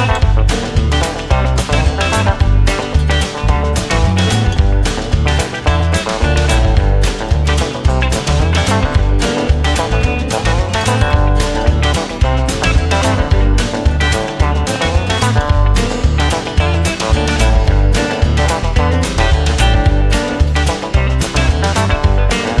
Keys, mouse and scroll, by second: 0.1 space, 0.7 space, 2.5 right click, 5.2 right click, 10.6 right click, 10.8 right click, 12.2 right click, 12.9 right click, 16.5 right click, 19.3 click, 20.3 space.